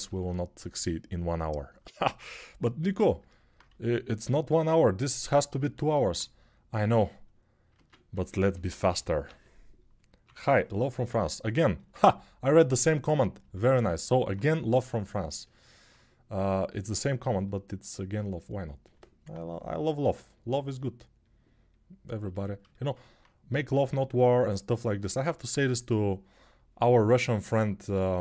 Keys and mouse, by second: 2.5-5.0 right drag, 3.7 s, 5.0-6.9 alt+middle drag, 6.9-8.2 right drag, 7.5 ctrl+Tab, 8.6 g, 9.0-9.9 ], 11.0-28.2 ctrl+alt+drag.